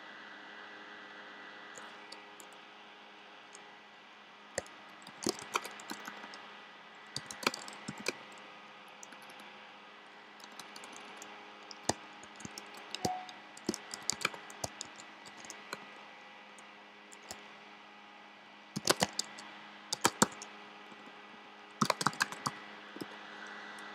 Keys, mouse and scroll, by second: 4.7-10.9 typing, 12.1-15.6 typing, 18.6-23.9 typing.